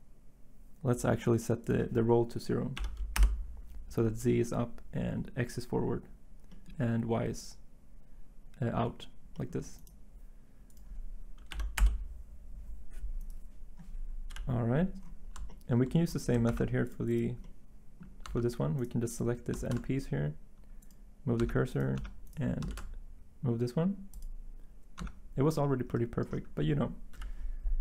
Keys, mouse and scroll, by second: 4.5 Return, 11.5 0, 11.8 Return, 14.3 7, 16.5 ctrl+Tab, 18.3 Tab, 19.6 s, 21.4 Tab, 22.0 Tab, 22.7 s, 25.0 Tab, 27.1 7.